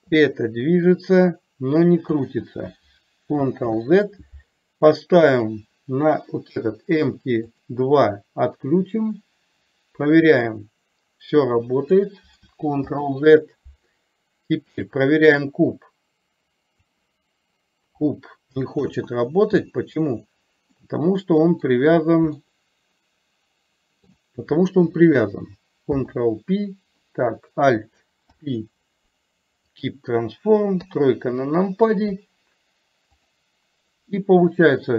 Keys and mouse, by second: 0.1-2.2 drag, 3.7 ctrl+z, 5.3 click, 7.5 click, 10.4-12.0 drag, 12.9 ctrl+z, 16.0 click, 18.9 ctrl+z, 20.9-21.6 middle drag, 22.5-24.2 middle drag, 25.9 alt+p, 30.9 KP_3, 34.6-34.9 drag.